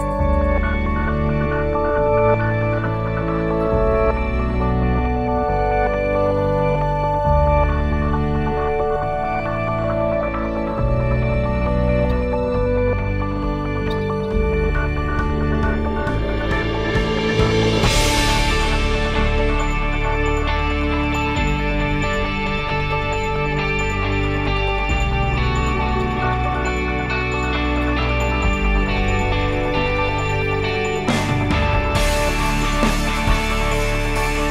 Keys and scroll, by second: 20.5 1, 21.1 Return.